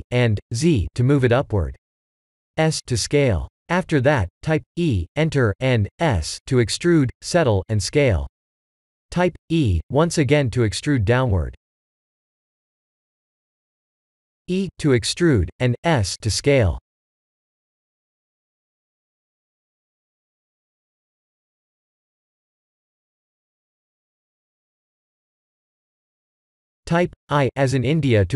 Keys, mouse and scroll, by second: 1.7 s, 8.1 e, 9.9 s, 13.2 e, 15.9 e, 18.6 s, 21.6 middle click, 22.4 shift+z, 22.7 middle click, 24.9 middle click.